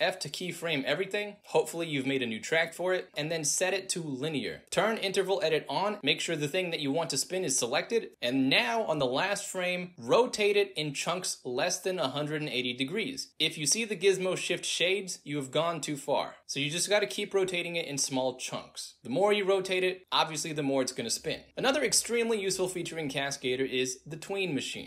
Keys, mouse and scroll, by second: 3.6 alt+f, 3.6 click, 5.2 click, 7.2 e, 10.5-11.4 drag, 12.1-15.2 drag, 16.1-16.5 drag, 16.6 drag, 17.1-17.8 drag, 18.0-19.0 drag, 19.6-24.8 drag.